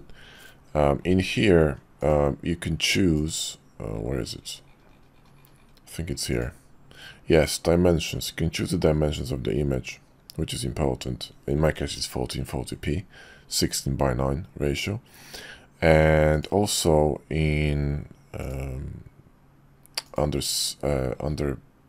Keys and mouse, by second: 3.2 click, 6.4 click, 7.5 click, 16.3 click, 18.5 click, 20.1 click.